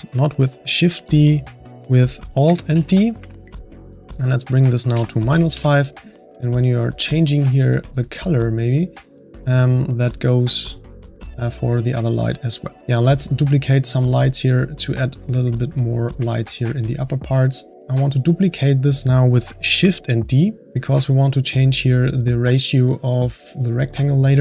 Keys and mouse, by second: 2.7 alt+d, 4.2-7.0 drag, 7.8 click, 8.6 click, 14.2-15.5 drag, 15.5-17.7 middle drag, 17.7 click, 18.2 click, 20.6 shift+d.